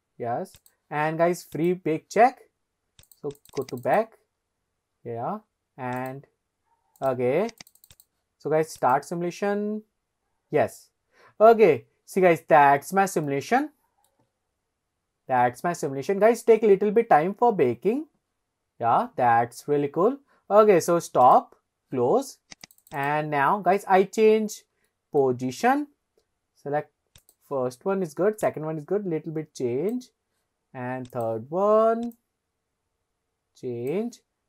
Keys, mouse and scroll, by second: 0.6 click, 1.6 click, 3.1 click, 3.4 click, 3.6 click, 4.0 click, 4.5-5.2 scroll up 5, 5.3 scroll down 1, 6.0 click, 7.6 click, 7.9 click, 8.8 click, 12.6-13.4 scroll down 1, 13.6-14.5 shift+middle drag, 16.4 scroll up 2, 21.6 click, 22.7 click, 22.9 click, 23.0 click, 23.4-23.8 scroll down 1, 23.8-24.7 middle drag, 25.0-25.3 shift+middle drag, 25.4 scroll down 1, 27.3 click, 28.5 click, 31.2 drag, 32.2 click.